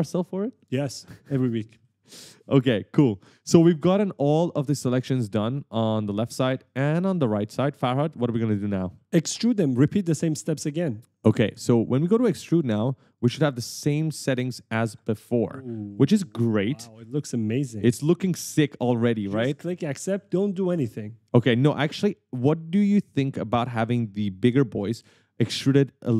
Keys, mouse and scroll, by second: 1.0 right click, 6.0 right click, 13.4 click, 14.0 right click, 18.2 w, 21.8-23.7 typing.